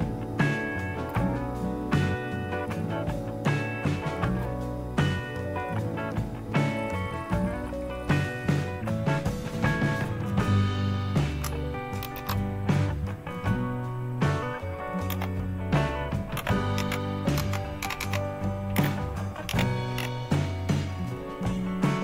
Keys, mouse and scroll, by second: 1.1 Down, 1.4 click, 2.4 click, 3.0 click, 3.4 click, 3.5 click, 4.0 click, 4.4 Escape, 4.4 Escape, 4.5 click, 5.0 click, 5.2 click, 5.4 click, 8.6 click, 12.0 shift+F10, 15.0 typing, 16.3-19.9 typing.